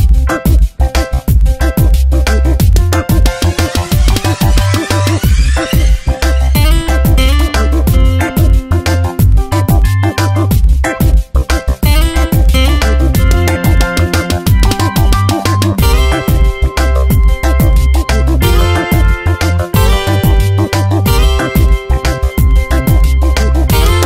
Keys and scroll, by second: 0.5 ctrl+shift+,, 3.1 ctrl+Return, 3.7 v, 9.7 ctrl+t, 11.5 Return, 12.1-15.1 typing, 16.8 ctrl+Return, 17.2 v, 21.0 Return, 21.4 Tab, 21.9 ctrl+t.